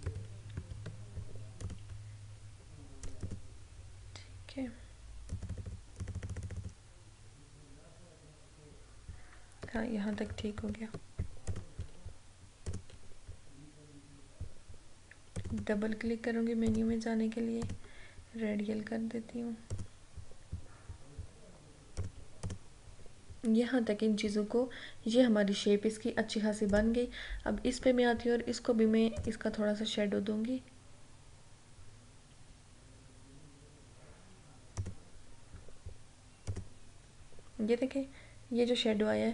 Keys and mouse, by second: 0.0 click, 0.1 ctrl+=, 1.7 click, 10.2 click, 10.4 ctrl+-, 11.6 click, 15.5 click, 22.1 click, 26.8 click, 29.3 click, 34.9 click.